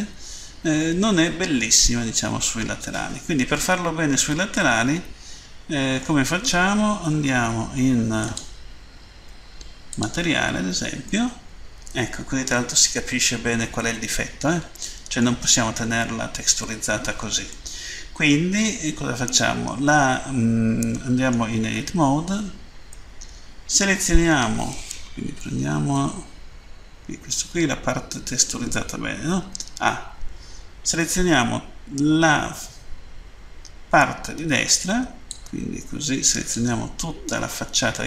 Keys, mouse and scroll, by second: 4.5 middle click, 8.1 click, 9.9 click, 11.1 middle click, 17.5 middle click, 19.3 middle click, 22.0 Tab, 22.9 middle click, 25.4 End, 35.1 click.